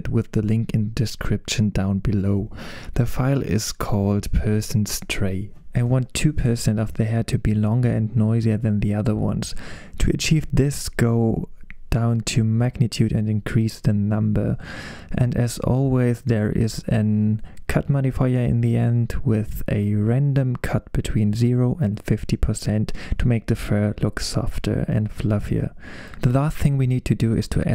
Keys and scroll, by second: 1.3 BackSpace, 2.8 super+v, 6.9 Return, 7.9 2, 8.2 Return, 12.3 4, 12.4 Return, 13.9 5, 14.0 Return, 22.1 BackSpace, 22.4 5, 22.7 Return.